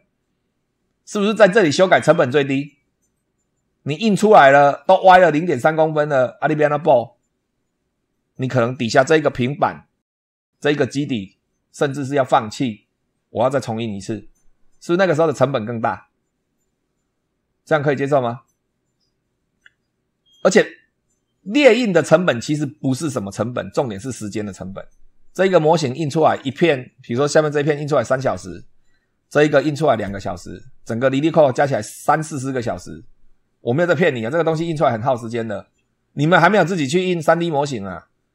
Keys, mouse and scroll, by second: 8.8 scroll down 2.